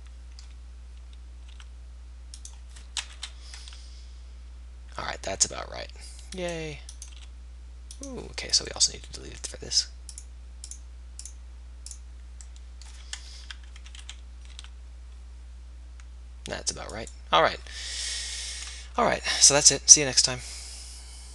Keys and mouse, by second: 1.8 r, 3.2 KP_1, 3.6 r, 7.2-13.5 drag, 7.2 r, 13.3 KP_Enter, 13.5 KP_3, 14.0 KP_1, 14.6 r, 16.9 middle click.